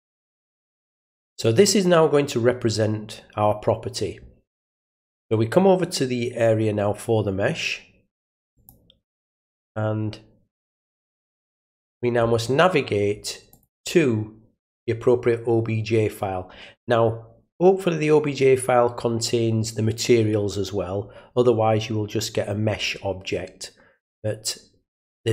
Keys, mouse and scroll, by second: 8.5 click, 10.6 click, 13.5 click.